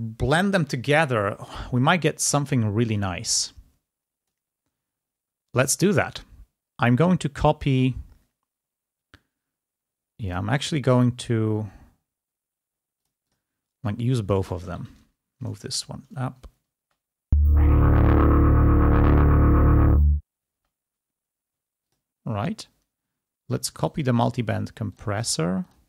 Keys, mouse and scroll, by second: 3.2-5.0 drag, 5.5 click, 8.5 scroll up 1, 8.7-9.1 scroll down 1, 13.0 click, 13.8 scroll down 1, 14.3 click, 14.9 ctrl+Up, 17.1 space, 21.0 space, 25.7 click.